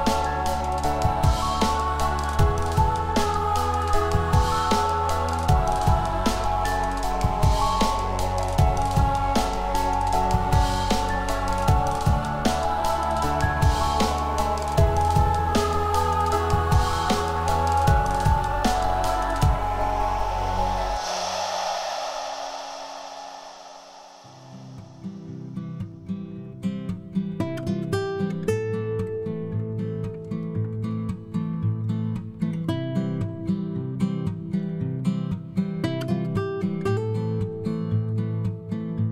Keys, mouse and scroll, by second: 26.0 4.